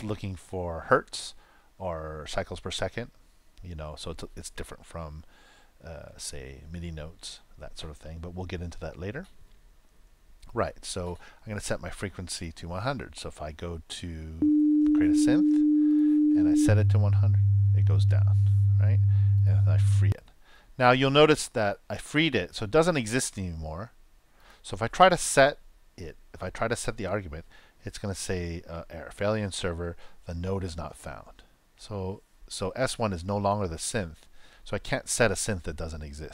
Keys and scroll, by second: 14.3 super+Return, 16.6 super+Return, 20.0 super+Return, 26.9 super+Return.